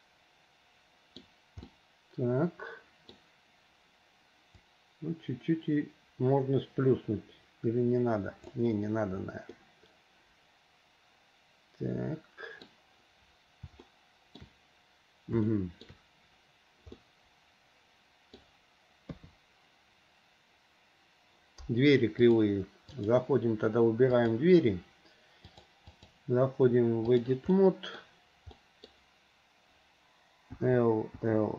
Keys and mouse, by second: 0.0-1.4 middle drag, 1.9-3.3 middle drag, 4.7 click, 5.2-8.7 drag, 9.7-12.9 middle drag, 14.1 shift+middle click, 15.6 shift+middle click, 17.2-18.6 middle drag, 19.2 KP_3, 22.4 click, 24.3 click, 25.6 click, 26.0-27.4 drag, 27.6 middle click, 28.7 middle click, 30.7-31.5 typing.